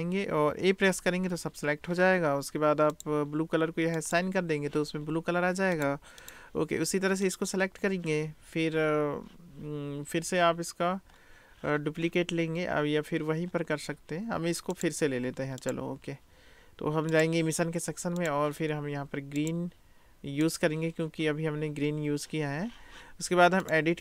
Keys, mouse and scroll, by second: 0.9 a, 3.0 click, 4.1 click, 5.7-6.4 drag, 7.3 click, 14.7 click, 15.6-16.2 drag, 17.3-18.3 drag, 23.8 click.